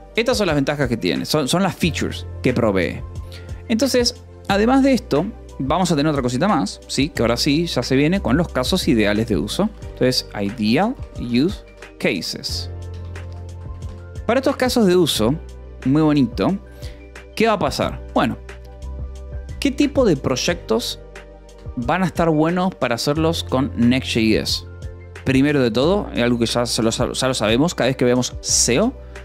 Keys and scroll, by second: 9.1-13.0 typing, 13.5 Escape, 14.2 j, 14.8 k, 15.2 j, 18.0 o, 18.5 Return, 19.3 space, 20.3 Escape, 20.5 d, 21.0 Escape, 21.3 a.